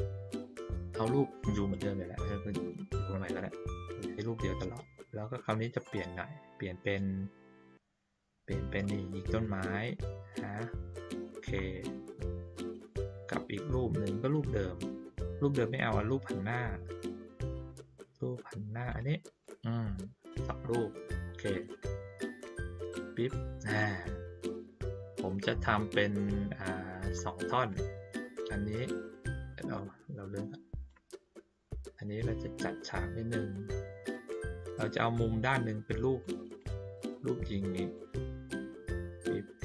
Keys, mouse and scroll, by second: 0.8 ctrl+middle click, 2.9 click, 8.8 click, 9.4-10.3 drag, 11.2 click, 14.2 click, 18.8 click, 19.4 shift+click, 21.4 shift+click, 23.7-26.2 shift+drag, 26.6 shift+middle click, 27.7 click, 28.2 click, 29.7-30.8 drag, 31.5 click, 33.7-36.2 drag, 36.5-37.9 drag, 38.4 click.